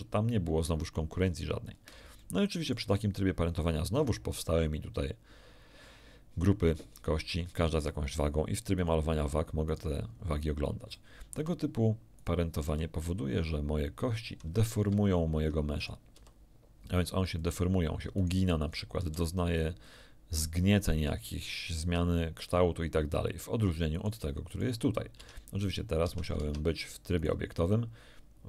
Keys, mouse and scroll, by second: 1.6-1.9 scroll down 2, 2.2 shift+middle click, 8.7 right click, 9.6 right click, 10.0 scroll up 2, 10.9 shift+middle click, 12.1 shift+right click, 12.6 r, 14.7 Escape, 15.7 right click, 16.1 r, 17.3 click, 18.1 right click, 18.6 right click, 18.9 r, 19.8 click, 23.9 right click, 24.4 right click, 25.1 Tab, 26.0 Tab, 27.2 ctrl+right click.